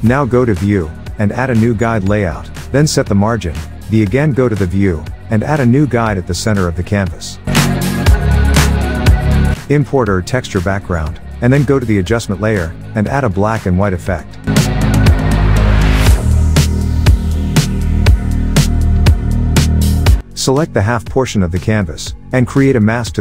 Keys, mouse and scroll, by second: 0.6 click, 7.5 alt+Num_Lock, 7.5 click, 7.7 alt+Tab, 8.9-11.8 drag, 10.8 alt+Tab, 13.1-22.4 drag.